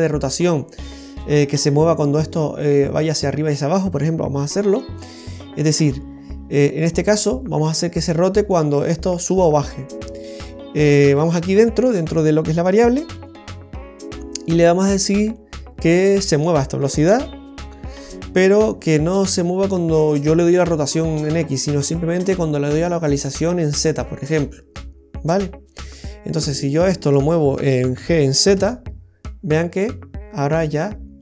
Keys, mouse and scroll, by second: 6.8 right click, 9.5 right click, 10.2 right click, 11.5 right click, 26.5 right click, 27.9 g.